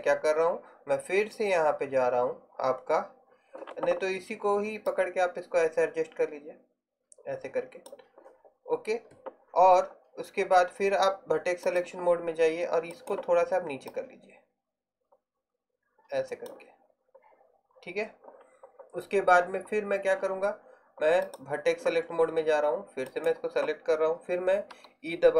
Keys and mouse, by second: 5.0-6.5 drag, 13.0-15.2 right drag, 21.3-24.8 right drag, 24.8 e.